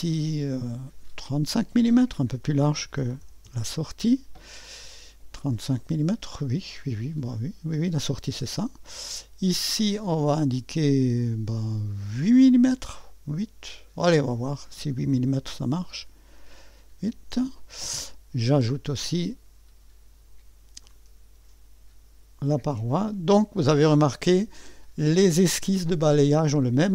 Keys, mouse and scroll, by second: 1.3-3.0 drag, 2.7-3.8 typing, 9.6-11.3 drag, 14.1 click, 15.5-16.2 typing, 17.0-21.0 Return, 18.9 click, 20.8 click, 22.7 click, 23.8-24.9 middle drag.